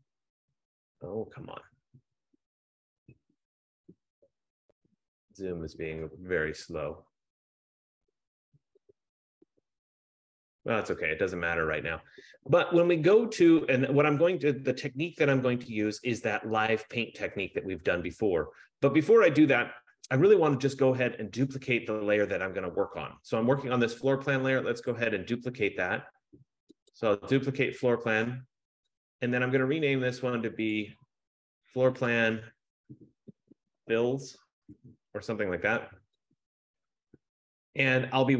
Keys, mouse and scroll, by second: 0.0 click, 7.0 click, 8.4 click, 9.1 click, 10.3 F15, 25.0 click, 27.0 click, 29.2 click, 29.9 click, 31.0 click, 31.1 click, 32.2 click, 33.4-34.9 typing, 36.5 click.